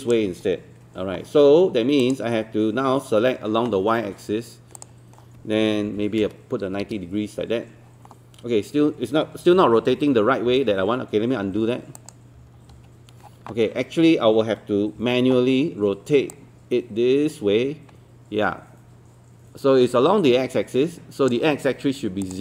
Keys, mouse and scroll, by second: 0.7 Escape, 2.0 click, 5.9 KP_9, 9.7 ctrl+z, 10.6 ctrl+z, 11.5 ctrl+z, 12.0 click, 12.4 z, 12.7 z, 15.0 e, 16.3-21.9 drag.